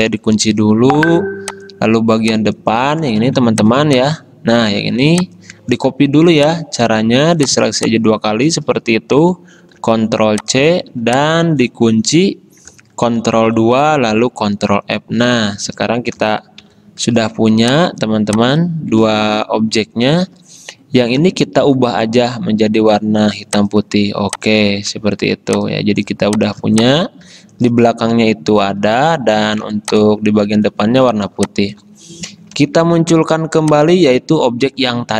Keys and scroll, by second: 0.4 ctrl+2, 3.3 ctrl+alt+2, 4.9 ctrl+z, 5.8 ctrl+z, 8.6 ctrl+z, 9.9 ctrl+c, 13.4 ctrl+2, 14.6 ctrl+f, 16.7 ctrl+shift+], 19.0 ctrl+z, 21.2 d, 29.3 ctrl+z, 31.4 space, 32.6 ctrl+alt+3.